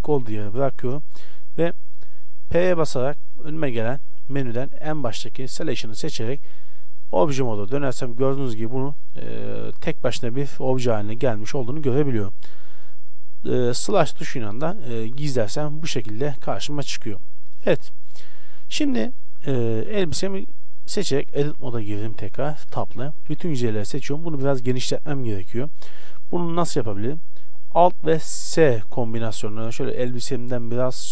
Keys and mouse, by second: 2.6 p, 7.3 Tab, 7.8-10.9 right drag, 8.5 z, 9.2 z, 10.4 g, 13.8 KP_Divide, 15.1-17.0 middle drag, 17.4 KP_Divide, 19.8 Tab, 23.4 a.